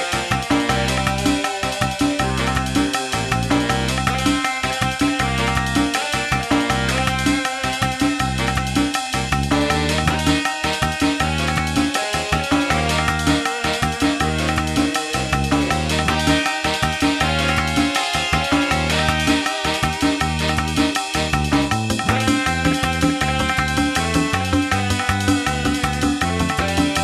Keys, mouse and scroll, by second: 4.9-5.4 scroll down 1, 5.7 shift+middle click, 7.0 middle click, 8.6 shift+middle click, 9.8 scroll up 2, 11.0-11.6 scroll up 1, 19.0 click.